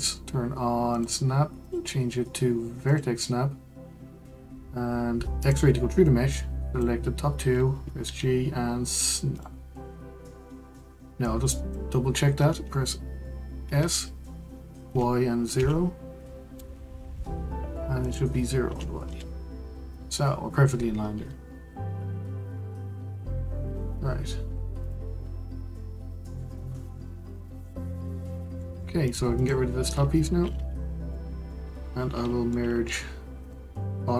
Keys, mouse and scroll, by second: 1.6-4.6 drag, 5.4 click, 8.0 g, 11.2 click, 13.6 s, 18.0-20.9 drag, 20.9-21.5 scroll down 3, 21.5 Tab, 24.8-25.2 drag, 25.2-25.7 scroll down 2, 25.7-27.5 middle drag, 27.5 click, 28.1-28.6 scroll down 4, 28.6-29.0 middle drag, 29.0 drag, 29.3 click, 30.5 Delete, 31.1-32.1 middle drag, 32.1-32.5 scroll up 1, 32.5-33.4 middle drag, 33.4 click.